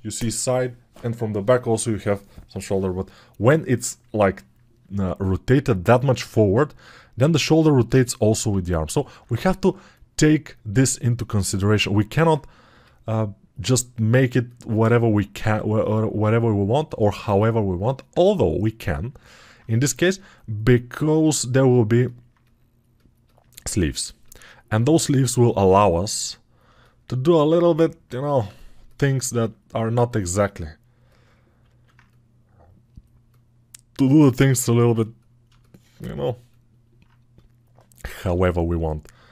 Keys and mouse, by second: 35.3 alt+shift+click, 35.3 alt+shift+right click.